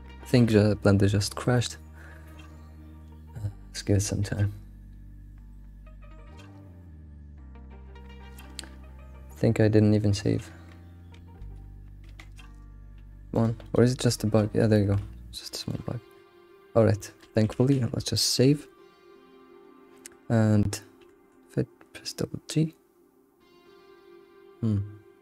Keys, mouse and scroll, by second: 14.1-14.4 scroll down 3, 14.4-15.3 scroll up 6, 14.7 shift+middle click, 15.3 scroll down 2, 15.5 shift+middle click, 15.8-17.0 scroll up 3, 17.0 shift+middle click, 17.5 ctrl+s, 18.2 shift+middle click, 18.5 scroll down 3, 21.0 g.